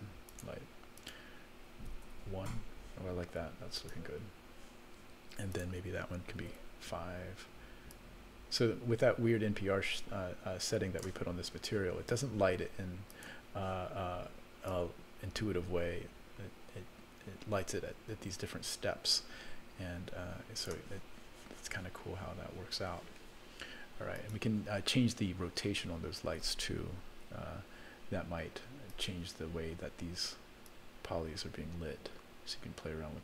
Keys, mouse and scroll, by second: 0.3 click, 1.0-2.2 drag, 3.7 click, 5.5-6.7 drag, 7.9-11.1 drag, 13.1 click, 14.6-20.7 drag, 24.1 click, 27.2 t, 28.9 click, 30.6-33.2 drag.